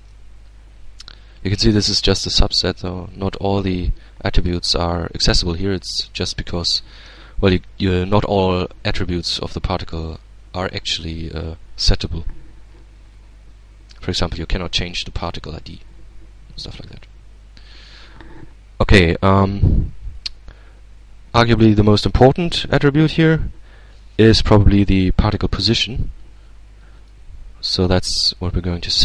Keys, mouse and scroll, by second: 2.1 click, 8.9-10.5 drag, 14.4 click, 19.7 click, 26.6 click, 27.9-29.0 middle drag.